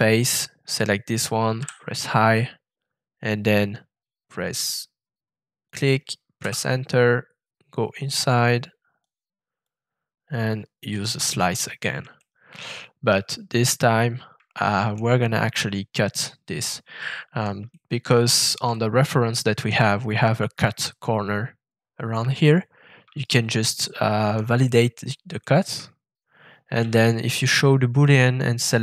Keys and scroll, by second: 1.5 i, 6.4 Return, 26.8 shift+<.